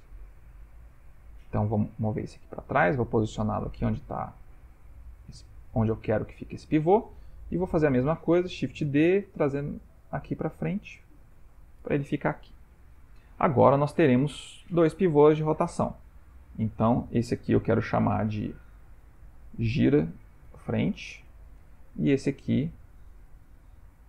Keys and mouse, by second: 8.9 shift+d, 12.8 ctrl+middle click, 16.2 ctrl+middle click, 17.5 click, 18.1 F2, 22.6 click, 23.8 F2.